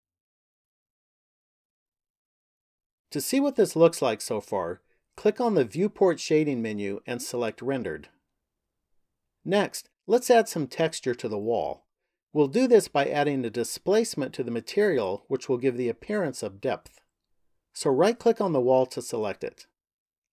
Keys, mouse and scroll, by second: 5.6 click, 18.1 right click.